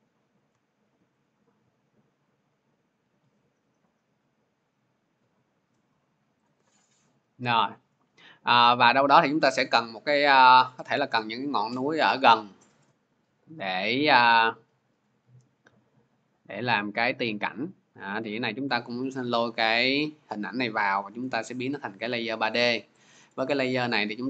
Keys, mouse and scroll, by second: 0.3-2.9 shift+drag, 6.2 shift+click, 12.6-14.1 drag, 14.8-19.9 drag, 21.3-22.8 drag, 22.3 middle click, 22.3-22.8 scroll.